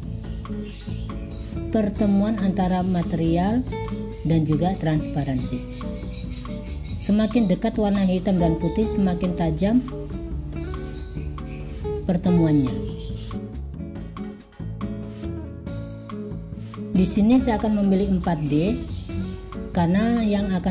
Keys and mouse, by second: 1.6-4.0 drag, 5.0 click, 12.6 click, 15.1 click, 15.5 click, 16.9-19.0 drag.